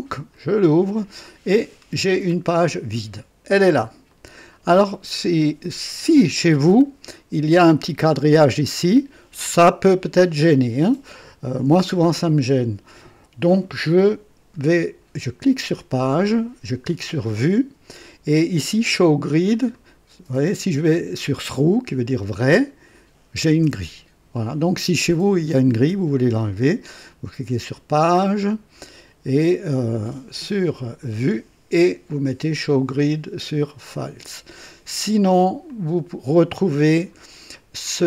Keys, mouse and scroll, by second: 0.3 click, 1.7-2.3 scroll down 2, 4.1 click, 17.2 click, 19.7 click, 20.3 click, 22.2 click, 27.9 click, 31.0 click, 32.5 click, 33.9 click, 35.7 click.